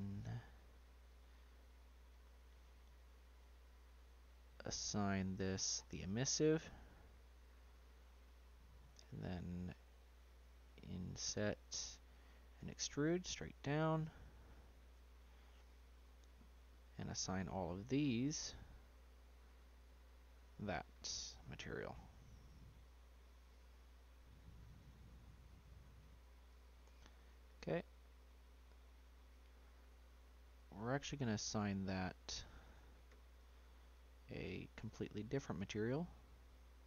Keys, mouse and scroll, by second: 1.1 click, 3.6-4.6 drag, 6.4-9.7 drag, 12.6 e, 14.4-15.5 scroll down 4, 15.5 click, 17.0-18.0 shift+drag, 19.6 click, 20.4-21.7 drag, 21.7-22.8 middle drag, 22.8 shift+click, 23.7-25.7 middle drag, 25.7 click, 27.0 scroll up 1, 27.4 click, 28.1-30.5 middle drag, 30.5-32.6 drag, 32.6 middle click, 32.9 scroll up 1, 33.3-34.4 shift+drag, 34.4-35.5 middle drag, 35.6 shift+click.